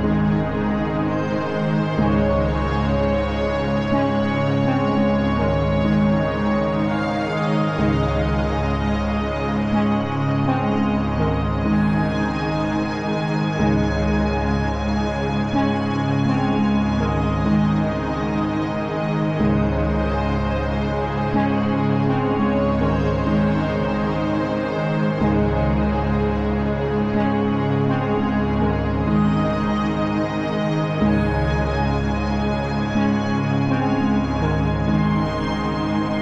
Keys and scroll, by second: 0.5 ctrl+shift+i.